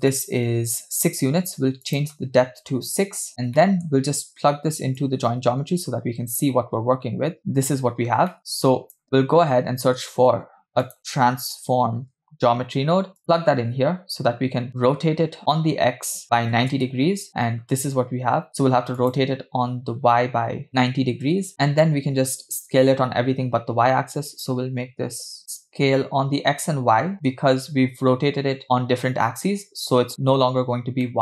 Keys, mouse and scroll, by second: 0.2-0.9 middle drag, 1.8-3.3 drag, 3.3-3.9 scroll down 4, 3.6 middle click, 5.0-7.4 drag, 8.3 middle click, 8.7 click, 10.1 shift+a, 14.7-15.0 scroll up 2, 16.2 click, 17.3 middle click, 18.2-18.7 scroll up 2, 19.0-21.2 drag, 21.8 middle click, 24.3-25.3 drag, 31.1 middle click.